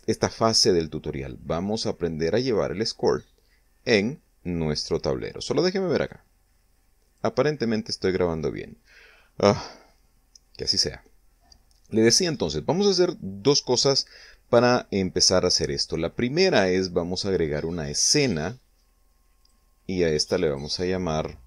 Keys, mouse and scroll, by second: 6.5 click, 7.6 click, 18.7 click, 19.9 click, 21.0 click.